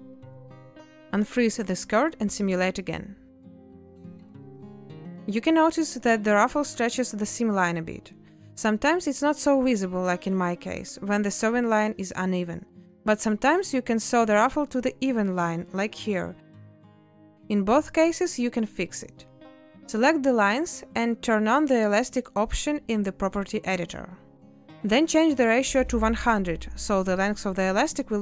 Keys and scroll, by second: 1.4 a, 3.5 ctrl+space, 19.6 z, 26.3 0, 26.6 Return.